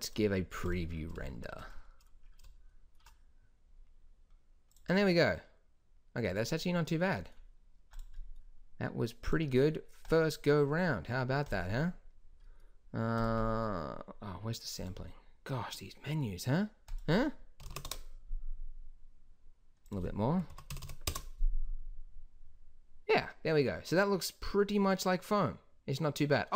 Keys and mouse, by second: 7.9-16.9 drag, 20.8 KP_0.